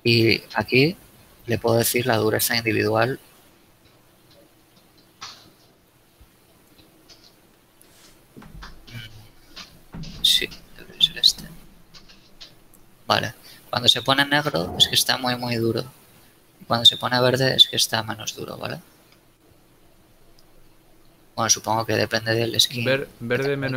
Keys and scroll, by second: 23.4 a.